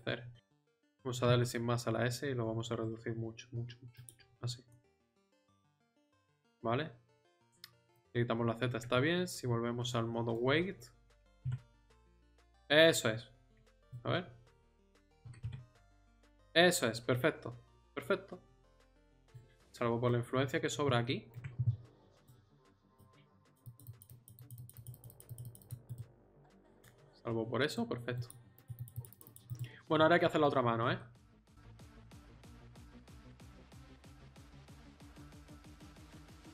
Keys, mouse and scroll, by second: 1.2 s, 5.0 middle click, 5.7 z, 8.4 middle click, 8.9 Tab, 11.2 r, 14.0 r, 14.4 z, 15.2 r, 19.7-21.0 middle drag, 22.2-26.5 drag, 26.5 middle click, 26.5 click, 26.8-27.8 middle drag, 28.3-29.5 drag, 30.0-31.2 middle drag, 31.8 middle click, 32.9 click, 33.9-35.3 drag, 35.3 KP_7, 35.8 KP_3.